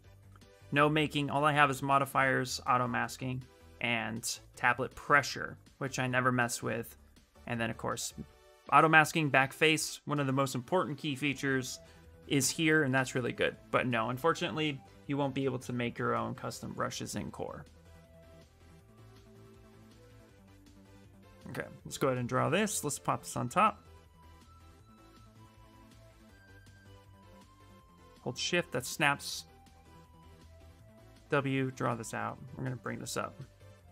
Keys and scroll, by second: 20.7 q, 22.0 x, 24.3 space, 25.0 space, 25.4 space, 29.6 shift+f, 30.7 w.